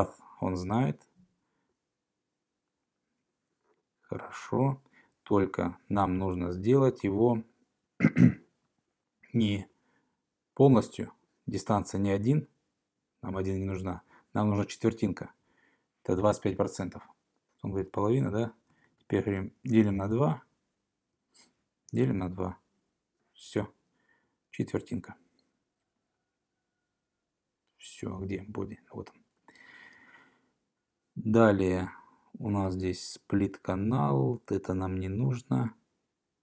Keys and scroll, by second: 16.4 Left, 17.5 Left, 17.5 BackSpace, 18.2 alt+Right, 18.7 Right, 18.9 Right, 19.1 Right, 19.5-20.4 typing, 21.7-22.5 typing.